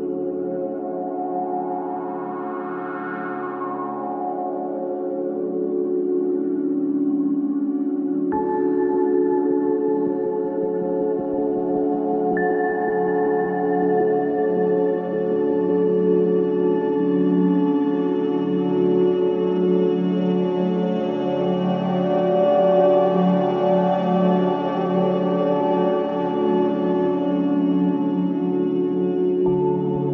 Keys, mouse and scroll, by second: 1.4 click, 1.9-3.9 middle drag, 3.9 click, 4.4 middle click, 5.1-5.9 scroll up 2, 5.9-7.2 middle drag, 7.2-8.8 drag, 10.4 shift+d, 12.3 shift+middle click, 13.1 click, 13.9 click, 14.8 click, 17.2 click, 17.9-18.5 middle drag, 18.5-19.7 scroll up 1, 19.7 click, 22.1-22.6 drag, 24.5 click, 25.6-27.8 middle drag, 27.8 click, 29.9 click.